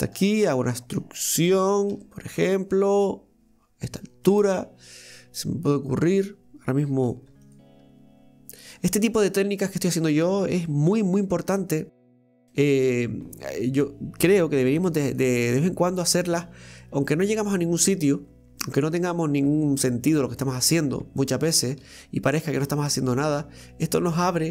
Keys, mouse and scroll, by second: 0.0 ctrl+shift+right click, 0.4-1.9 middle drag, 1.9 e, 4.6-7.1 middle drag, 7.1 ctrl+r, 9.0-13.9 middle drag, 16.8-19.8 middle drag, 20.3 click, 21.2 middle click, 21.8 ctrl+r.